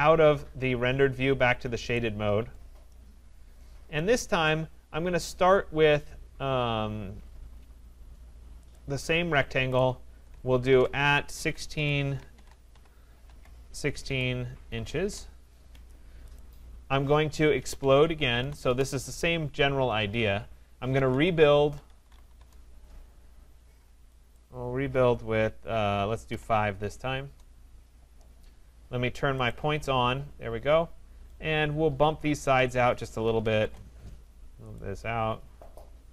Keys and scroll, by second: 15.0 Return, 27.2 Return, 33.6 Return.